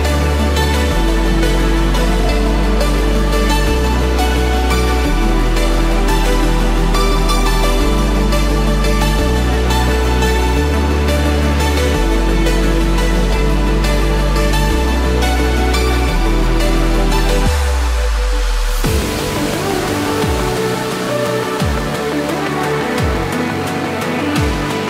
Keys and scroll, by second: 7.0 ctrl+=, 7.8 ctrl+=, 20.6 ctrl+z.